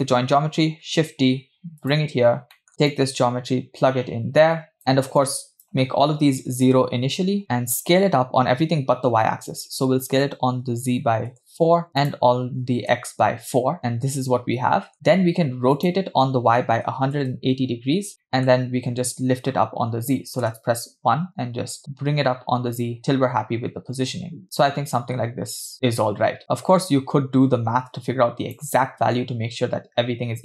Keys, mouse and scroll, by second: 0.9 shift+d, 2.3 scroll down 2, 2.5 middle click, 3.0-4.8 drag, 4.8-5.1 scroll up 4, 5.2-6.9 shift+drag, 7.5 shift+middle click, 9.5-11.5 drag, 12.0 click, 13.8-14.9 middle drag, 15.8-18.1 drag, 18.2 middle click, 20.5 KP_1, 21.8-28.8 shift+drag, 29.1-30.1 scroll up 2.